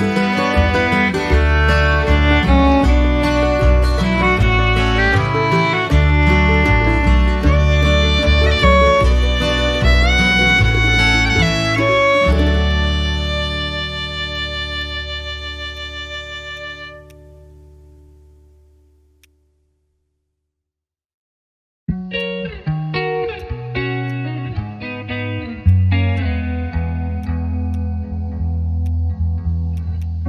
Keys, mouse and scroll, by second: 2.5 shift+click, 4.2 ctrl+z, 4.9 x, 5.1 shift+click, 9.2 right click, 11.6 right click, 19.2 ctrl+shift+click, 20.1 ctrl+shift+space, 21.5 ctrl+shift+space, 21.9 ctrl+z, 22.1 ctrl+shift+click.